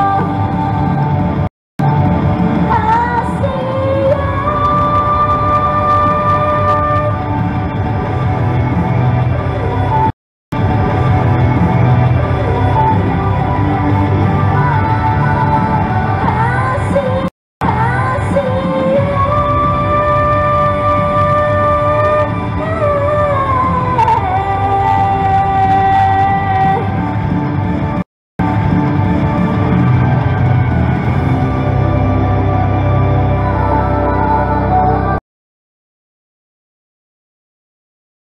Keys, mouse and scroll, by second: 1.5 right click, 1.6 Return, 1.8 space, 10.1 right click, 10.3 Return, 10.5 space, 17.3 right click, 17.5 Return, 17.6 space, 28.0 right click, 28.2 Return, 28.4 space, 35.1 click.